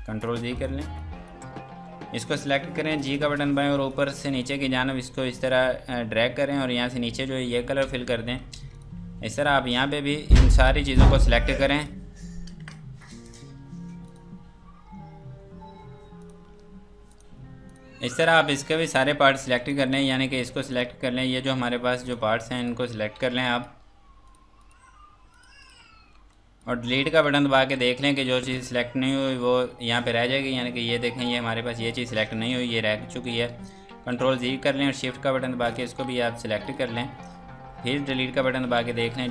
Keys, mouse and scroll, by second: 0.2 click, 2.5-3.3 typing, 3.2 click, 7.9 scroll down 1, 8.5 ctrl+space, 8.7 click, 9.2 F2, 9.4 click, 11.8 click, 13.0 click, 14.1 Escape, 16.2 click, 19.1 scroll down 1, 19.4 F2, 19.7 click, 20.7 shift+click, 22.1 shift+click, 22.6 click, 23.0 scroll down 1, 23.1 F2, 23.4 click, 24.3 click, 24.6 shift+click, 25.3 shift+click, 25.8 click, 25.9 scroll down 1, 26.2 F2, 26.3 click, 27.6 Delete, 29.3 scroll up 1, 30.1 scroll down 1, 30.9 scroll up 1, 31.7 scroll down 1, 32.3 right click, 35.7 shift+click, 36.6 shift+click, 37.2 scroll down 1, 37.8 Delete.